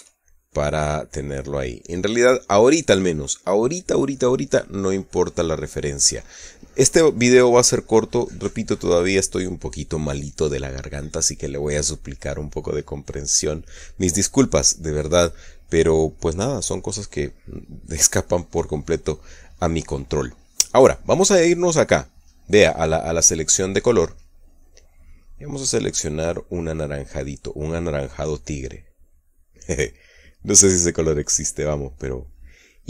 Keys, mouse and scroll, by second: 0.2 KP_Add, 0.9 middle click, 5.6 middle click, 24.8 click.